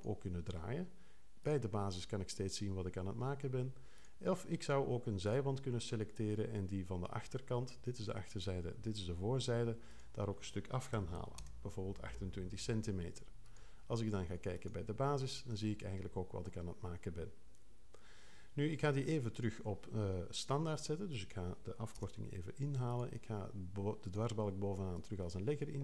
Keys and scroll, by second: 10.7-11.6 typing, 21.9 0.